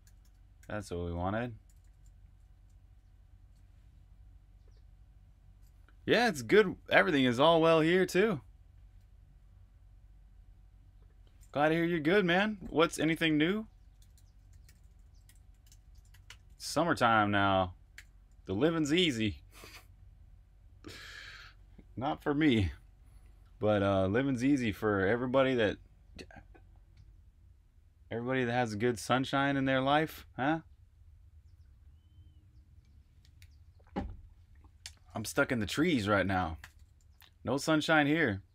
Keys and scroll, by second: 0.0-3.3 typing, 12.2 Escape, 13.0-18.0 typing, 36.1 Escape, 36.3-37.5 typing.